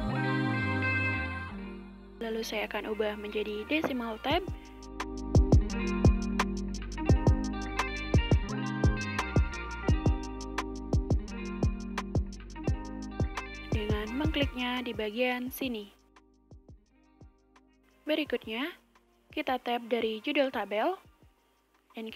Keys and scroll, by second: 0.0-4.3 typing, 6.1 typing, 16.7 Tab, 20.0 1.